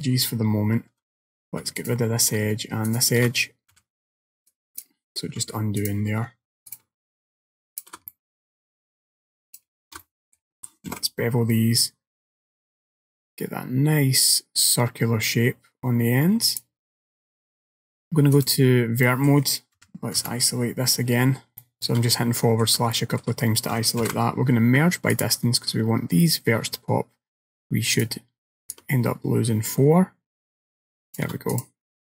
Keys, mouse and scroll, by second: 1.9 alt+click, 2.9 alt+shift+click, 3.8 x, 5.9 alt+click, 6.8 alt+shift+click, 7.8 alt+shift+click, 8.2 middle click, 9.6 alt+shift+click, 10.1 middle click, 11.0 ctrl+b, 18.4 click, 19.1 middle click, 21.3-21.6 scroll up 4, 21.7 shift+middle click, 22.2 middle click, 23.0 shift+middle click, 24.1 alt+m, 28.0 click, 28.8 shift+click, 31.6 click, 32.0-32.1 scroll down 3.